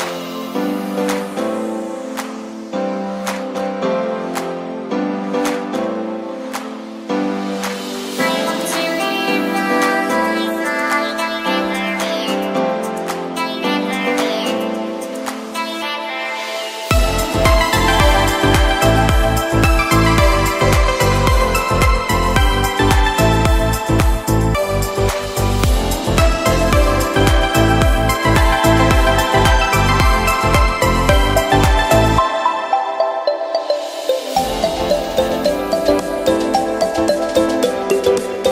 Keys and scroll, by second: 1.1 0, 1.6 [, 10.7 ], 13.0 [, 15.4 ], 17.2 ], 19.1 [, 21.7 [, 23.2 z, 24.4 v, 26.8 v, 31.1 super+], 31.7 ctrl+super+], 31.8 ctrl+super+Tab, 32.2 ctrl+super+Tab, 32.3 ctrl+super+w, 36.3 super+t, 36.9 alt+super+t, 38.4 alt+shift+super+z.